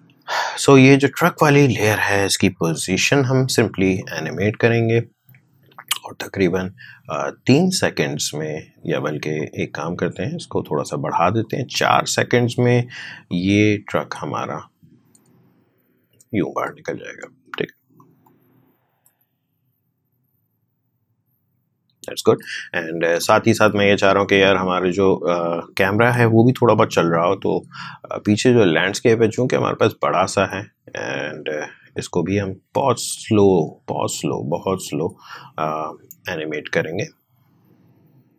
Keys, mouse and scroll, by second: 2.6 p, 3.9-17.9 drag, 17.9 click, 19.0 space, 22.2 space, 23.2-24.8 drag, 26.8 p, 27.8-32.7 drag, 32.7-38.3 drag.